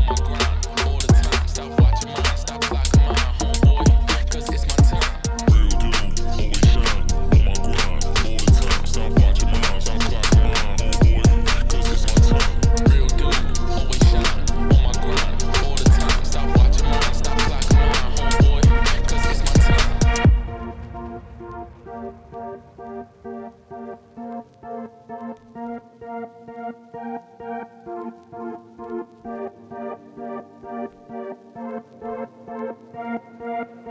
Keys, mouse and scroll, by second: 1.2 shift+d, 2.0 m, 3.2 click, 4.0 click, 4.6 click, 10.0 q, 10.2 click, 11.1 click, 12.2 shift+click, 13.5 ctrl+p, 14.1 KP_Divide, 14.7 KP_Divide, 15.5 alt+h, 16.1 KP_Divide, 16.6 click, 16.7 scroll down 3, 16.9 middle click, 17.2 click, 17.5 r, 18.7 middle click, 19.1 r, 22.1 middle click, 22.9 KP_1, 23.4 shift+middle click, 23.6 scroll up 2, 24.6 middle click, 24.8 scroll down 2, 25.6 Tab, 25.8 a, 26.2 KP_3, 26.8 scroll up 1, 27.0 g, 28.3 Tab, 28.5 middle click, 28.6 scroll down 2, 28.8 middle click, 29.3 g, 30.1-31.3 middle drag, 31.5 scroll down 1, 31.8 scroll up 1, 32.0 middle click, 32.4 click, 32.6-33.9 middle drag.